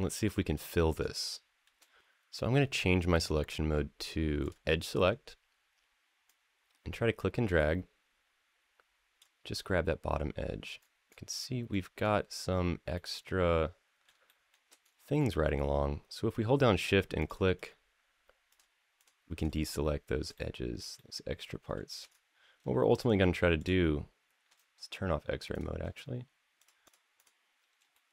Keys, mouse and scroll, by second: 0.4-1.0 scroll down 2, 1.1 shift+middle click, 4.2 click, 6.0-9.0 drag, 10.6-11.9 scroll up 7, 12.7-13.9 middle drag, 14.1 shift+middle click, 14.6-15.4 scroll up 3, 16.5 shift+click, 17.0 shift+click, 17.3 shift+click, 18.3 shift+click, 18.8 shift+click, 19.1 shift+click, 19.4 shift+click, 20.1-20.6 middle drag, 20.7-21.5 shift+middle drag, 21.9-22.3 scroll down 1, 22.7 shift+click, 23.4 shift+click, 25.3 click, 26.4 shift+click, 26.6 shift+click, 27.0 shift+click, 27.7-28.1 shift+middle drag.